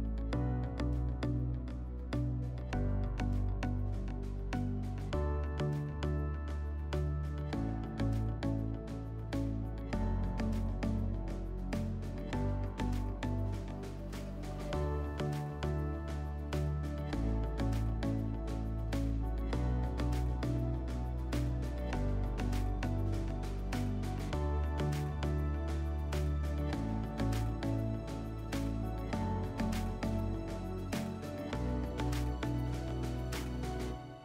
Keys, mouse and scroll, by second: 0.6 click, 8.7 click, 11.1-13.3 drag, 14.5-16.6 drag, 19.0 click, 20.0 click, 21.0 click, 24.7 click, 26.0 click, 30.2 right click, 31.3 click, 33.0 click, 33.3 click.